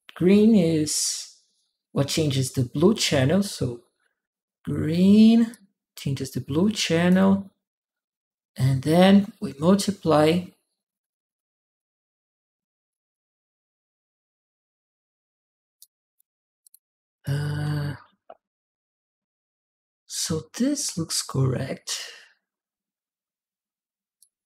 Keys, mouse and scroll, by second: 5.3-6.9 drag, 15.6 right click, 16.4 click, 16.9 click, 24.0-24.4 drag.